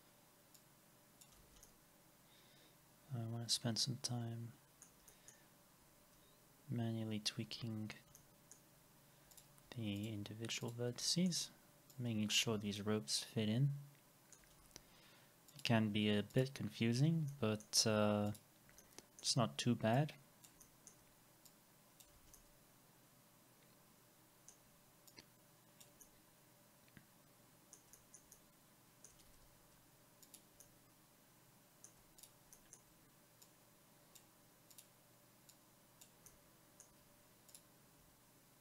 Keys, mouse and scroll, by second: 1.6 alt+x, 5.1 alt+middle click, 7.4 alt+x, 8.2 alt+middle click, 10.0 ctrl+click, 11.0 alt+middle click, 12.5 alt+x, 12.8 alt+middle click, 13.1-13.8 alt+scroll down 1, 14.6 alt+x, 14.9 scroll up 1, 16.4 ctrl+click, 17.3 alt+middle click, 18.3 ctrl+click, 18.8 alt+middle click, 20.6 alt+middle click, 22.1 alt+x, 22.3 alt+middle click, 26.0 alt+middle click, 27.9 alt+middle click, 28.3 alt+middle click, 29.3 alt+x, 30.6 alt+middle click, 32.5 alt+middle click, 36.3 alt+middle click.